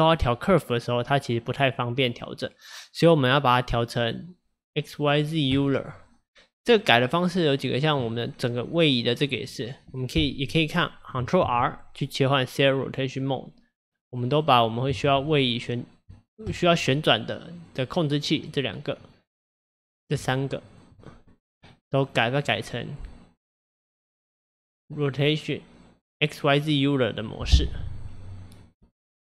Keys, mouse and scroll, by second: 3.8-6.8 drag, 7.7 click, 11.5 ctrl+r, 14.4 click, 15.1 ctrl+r, 17.6 click, 18.4 click, 19.1 drag, 19.5 click, 20.3 shift+click, 20.7 shift+click, 21.7 click, 22.9 click, 23.6 click, 23.8 click.